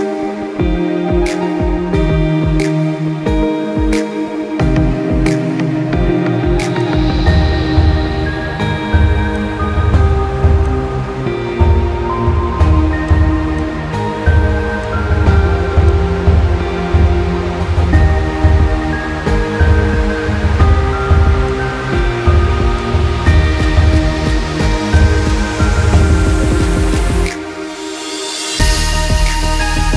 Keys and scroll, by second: 2.1-3.5 typing, 11.8 ctrl+z, 19.8 ctrl+-, 20.0 ctrl+-, 20.2 ctrl+-, 23.6-25.2 typing, 26.8 typing.